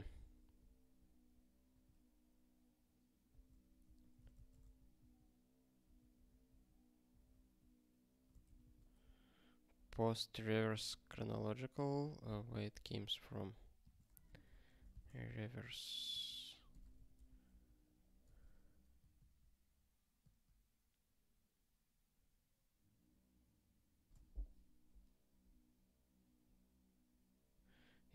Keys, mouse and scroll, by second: 3.3 ctrl+r, 3.6-4.8 typing, 4.9 ctrl+r, 8.4 ctrl+g.